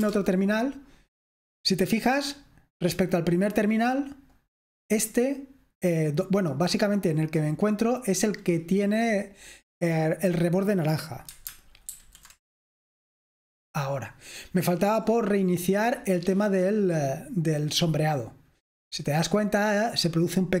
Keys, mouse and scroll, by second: 0.0-20.6 typing, 0.0 super+Return, 2.3 click, 2.9-4.1 drag, 4.3-5.6 drag, 6.4-8.7 drag, 11.9 alt+super+r, 16.4-20.6 drag.